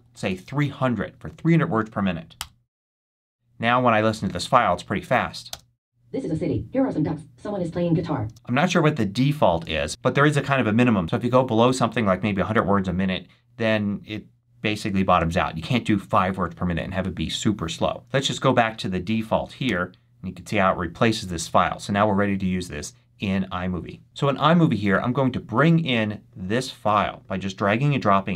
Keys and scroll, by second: 0.0-0.5 typing, 2.2 Return, 5.4 space, 8.1 space, 9.5 Up, 18.7 BackSpace, 19.5 Return.